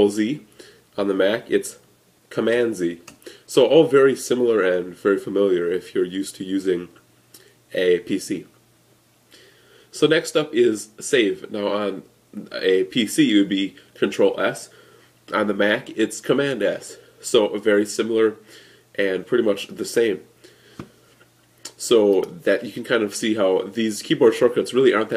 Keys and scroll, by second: 2.4 super+z, 16.3 super+s.